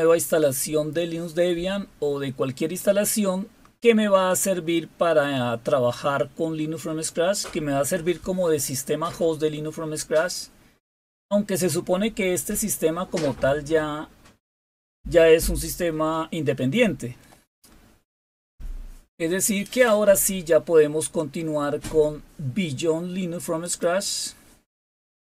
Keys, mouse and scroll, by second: 13.7-14.3 scroll up 2, 14.3-14.8 scroll up 2, 15.1 scroll up 1, 19.6 click, 23.5 click, 24.4 click.